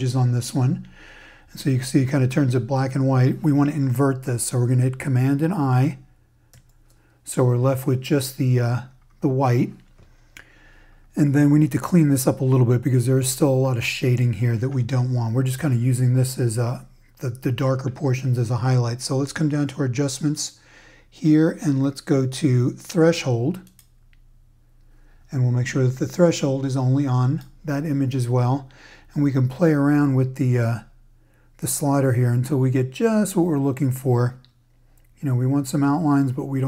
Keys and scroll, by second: 6.5 super+i.